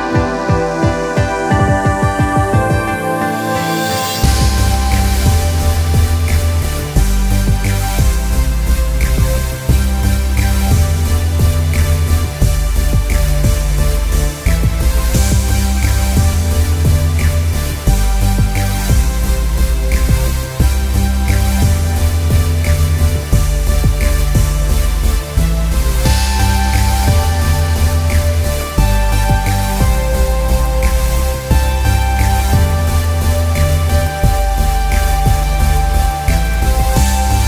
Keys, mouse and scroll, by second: 1.1 Return, 5.0 click, 11.6 Return, 13.0 ctrl+click, 14.3 ctrl+alt+click, 15.4 ctrl+t, 15.8 ctrl+click, 16.8 ctrl+Return, 17.7 ctrl+alt+q, 18.5 Tab, 20.1 click, 22.0 Return, 23.0 ctrl+t, 25.2-26.7 drag, 26.7 Return, 28.3 ctrl+click, 29.2 ctrl+t, 30.5 Return, 31.4-32.8 ctrl+drag, 32.8 ctrl+alt+click, 33.5 ctrl+t, 33.9-37.4 ctrl+drag.